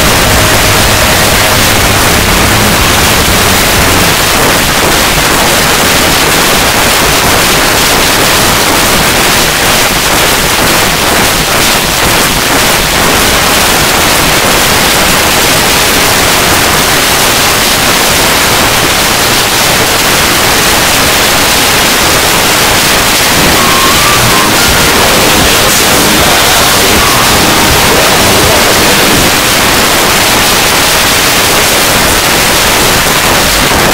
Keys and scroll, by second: 4.1 Page_Down, 29.3 Page_Down.